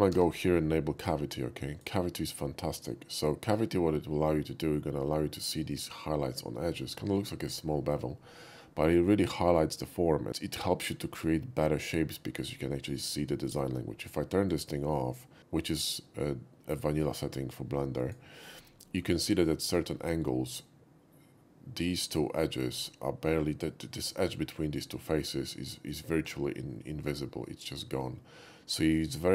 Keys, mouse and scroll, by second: 0.1 n, 1.7 click, 2.7 n, 7.3 shift+middle drag, 14.5 click, 18.0 click, 18.9 shift+middle drag, 19.2-19.8 shift+middle drag, 20.3-22.6 shift+middle drag, 23.9 middle click, 24.7-26.0 middle drag.